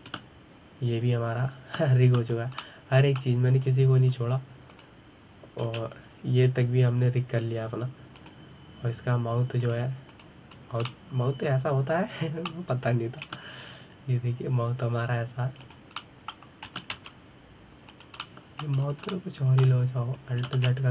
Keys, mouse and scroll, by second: 0.1 click, 0.8 click, 1.9 r, 4.4-5.5 middle drag, 5.5-6.5 scroll up 1, 6.5 click, 7.5 r, 11.4 click, 11.9 click, 12.7-15.0 middle drag, 15.0 s, 17.8 middle click, 18.5 s, 20.0-20.6 middle drag, 20.6-20.9 scroll up 1.